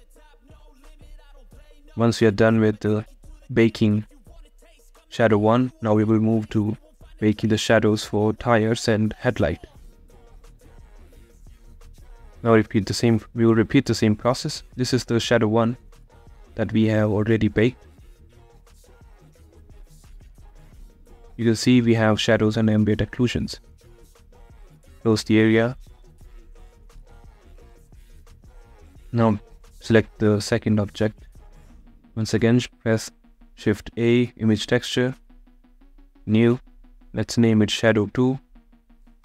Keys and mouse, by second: 6.3-7.7 drag, 8.2-9.2 drag, 9.2-13.9 right drag, 13.9 click, 25.4 shift+middle click, 27.6 click.